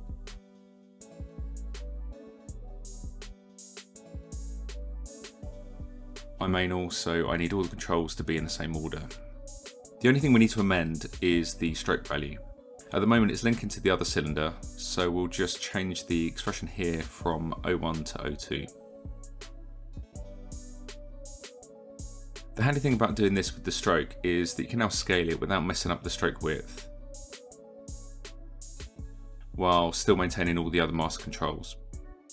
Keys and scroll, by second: 4.0 ctrl+v, 9.5 e, 9.6 e, 22.5 KP_1, 22.7 Return, 26.3 KP_5, 26.5 Return.